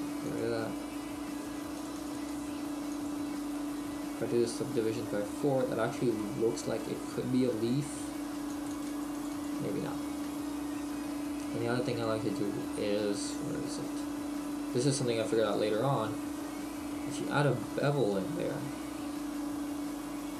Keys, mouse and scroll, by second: 0.3 click, 3.6 middle click, 6.3 middle click, 8.5-10.3 click, 10.3 middle click, 11.9 click, 17.6 middle click.